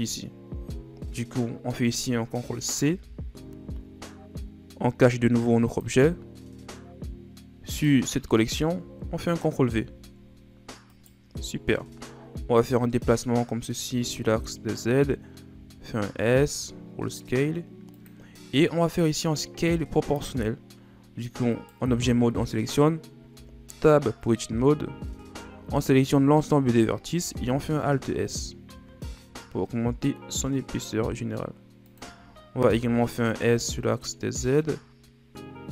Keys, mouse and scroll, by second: 0.9 shift+scroll up 4, 2.9 ctrl+c, 5.7 click, 7.8 click, 8.5 shift+scroll down 4, 9.7 ctrl+v, 10.9 right click, 11.6-12.6 shift+scroll up 1, 12.6-14.1 drag, 14.1-14.5 scroll down 3, 14.5-15.5 scroll up 5, 15.5 s, 18.9 right click, 21.5 right click, 23.3 Tab, 24.6 a, 25.0 a, 27.4 alt+s, 32.6 s.